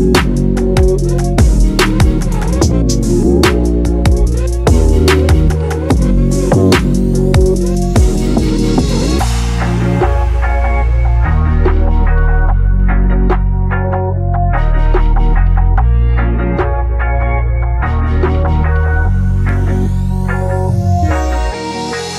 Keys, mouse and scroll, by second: 2.2-4.2 drag, 5.7-8.0 middle drag, 8.0 click, 11.6 click, 13.0-14.6 drag, 14.6-16.6 drag, 19.6-21.7 drag.